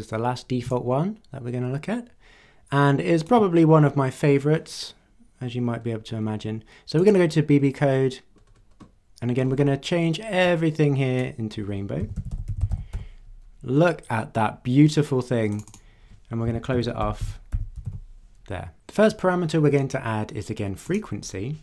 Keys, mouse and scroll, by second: 0.7-3.4 ctrl+drag, 5.4-6.0 scroll down 2, 6.2 scroll down 2, 7.0 click, 7.6-8.1 scroll down 2, 8.4-8.8 scroll down 2, 8.8 scroll up 2, 9.4 scroll down 2, 10.4-11.4 drag, 11.8-13.4 typing, 15.5 click, 16.2-18.3 typing, 20.8 click.